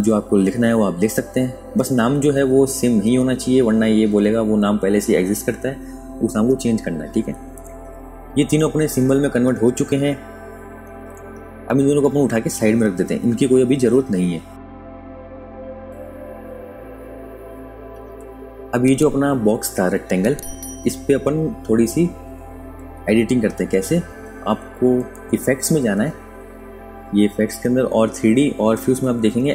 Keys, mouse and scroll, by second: 4.8 KP_3, 5.9 click, 8.1 super+KP_Subtract, 9.3 click, 11.2 click, 15.0 ctrl+click, 21.5 click, 26.2 click, 28.0 KP_Add.